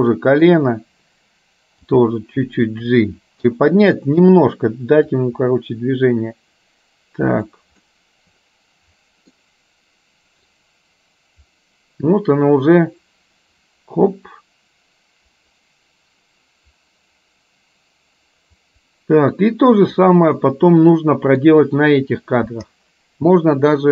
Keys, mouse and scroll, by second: 2.0 g, 3.5 i, 5.3-7.6 drag, 7.9-9.5 middle drag, 10.6-20.1 drag, 20.5-21.5 middle drag.